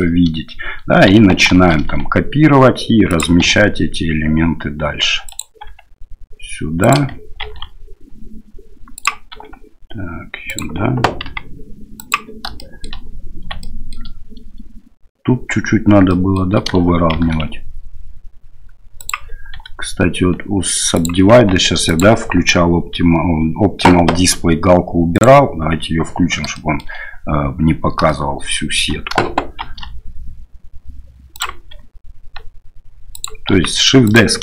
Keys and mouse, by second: 1.6 shift+d, 3.4 r, 5.8 g, 7.5 shift+d, 9.4 r, 11.4 g, 12.7 shift+click, 13.6 shift+middle click, 16.2 shift+middle click, 17.2 shift+d, 19.6 r, 21.5 g, 26.6 shift+middle click, 28.1 shift+middle click, 29.7 shift+d, 31.8 r, 33.6 g.